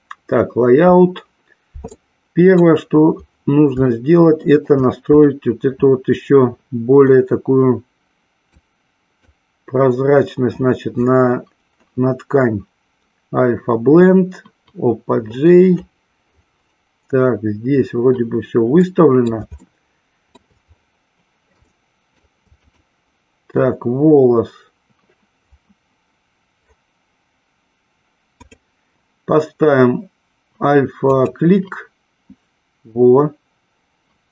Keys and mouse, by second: 2.1 middle click, 3.8-4.8 shift+middle drag, 5.1 click, 8.6 click, 18.7 middle click, 19.7 shift+middle click, 21.7 shift+middle click, 22.7 click, 28.4-31.6 drag.